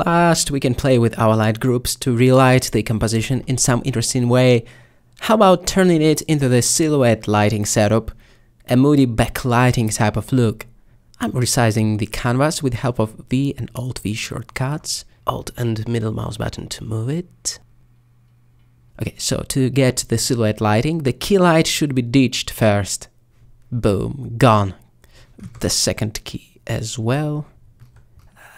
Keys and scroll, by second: 6.0 alt+Tab, 9.7 v, 9.9 v, 12.6 alt+v.